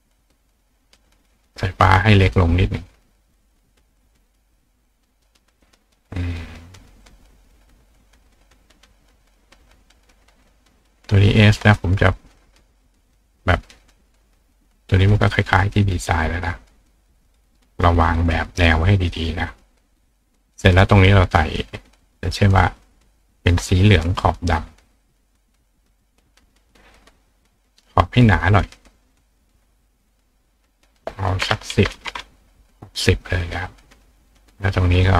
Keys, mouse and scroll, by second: 0.4 click, 1.0 click, 2.6 click, 4.4-5.6 drag, 6.0 click, 7.1 click, 8.6-10.5 drag, 15.3-17.4 drag, 18.1 click, 19.9 click, 21.9 click, 25.1 click, 27.7-29.4 drag, 30.7 click, 33.6 click, 35.0 click.